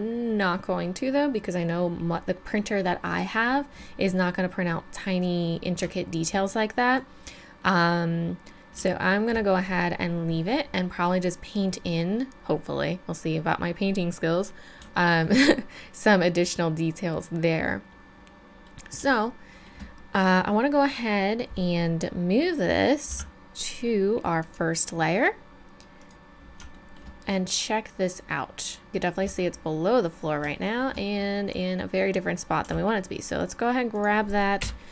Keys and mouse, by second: 8.2-9.1 middle drag, 12.0-14.9 middle drag, 17.4 middle click, 23.1 m, 26.7-28.2 middle drag, 32.6 g, 34.6 KP_1.